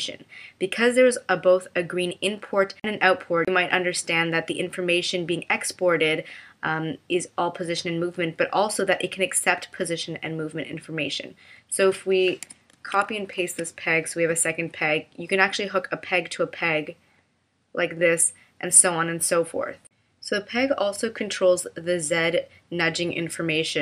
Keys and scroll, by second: 12.7 super+c, 13.3 super+v.